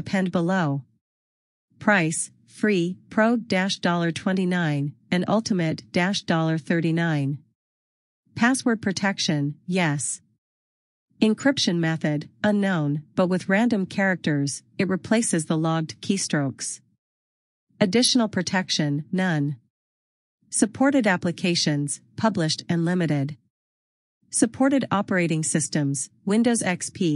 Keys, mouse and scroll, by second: 4.0 click, 14.4 click, 26.1 click.